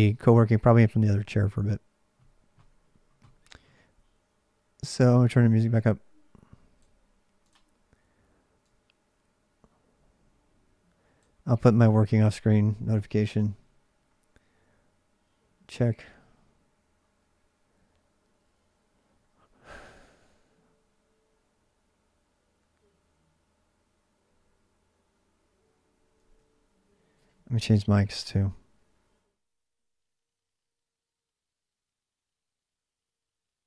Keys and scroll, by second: 2.4 ctrl+r, 7.5 Return, 7.5 super+Tab, 7.5 ctrl+r, 7.5 typing.